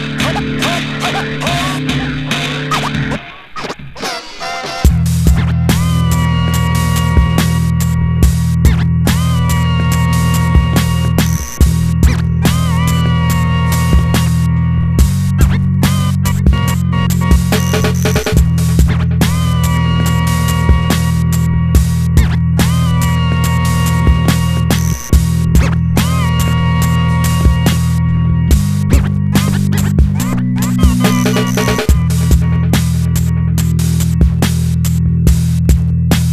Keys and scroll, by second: 0.0-0.9 typing.